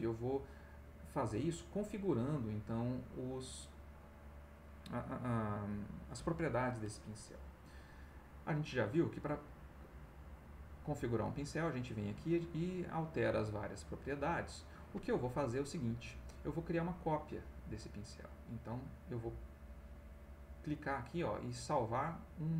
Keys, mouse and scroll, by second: 7.6 middle click, 10.0 click.